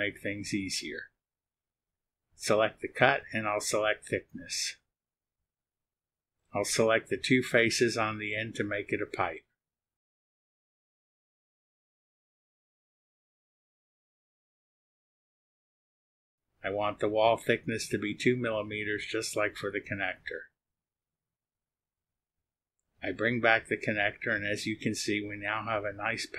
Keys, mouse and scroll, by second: 0.5 space, 3.5 click, 4.4-5.4 drag, 4.5 right click, 6.4 click, 7.2 click, 7.7-8.8 drag, 9.9 ctrl+click, 12.1-13.2 drag, 13.8 click, 16.6 click, 17.6 click, 19.5 click, 20.0 space, 21.0 click, 21.5-22.5 drag, 22.6 click, 23.1 click, 23.9 click, 24.3-26.3 drag.